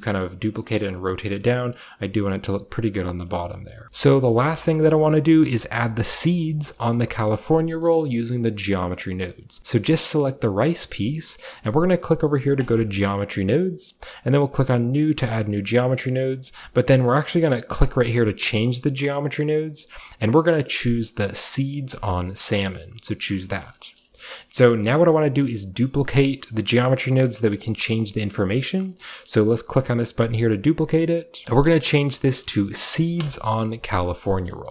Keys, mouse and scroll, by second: 0.2-0.6 scroll up 1, 1.5 middle click, 1.5 typing, 1.9-2.6 middle drag, 3.1 middle drag, 3.2-3.8 scroll up 1, 3.5-3.8 middle drag, 3.8 ctrl+z, 7.0-12.6 middle drag, 12.6 click, 15.2 click, 16.1 middle click, 16.2-17.0 scroll down 2, 17.0-17.9 scroll down 1, 17.9 click, 22.0 click, 23.6 shift+middle drag, 24.1 shift+middle click, 24.7-25.8 shift+middle drag, 26.0-27.7 middle drag, 26.5-27.7 scroll down 1, 28.2-30.2 middle drag, 30.2 click, 31.1 click, 31.4-33.7 typing, 34.6-34.7 middle drag.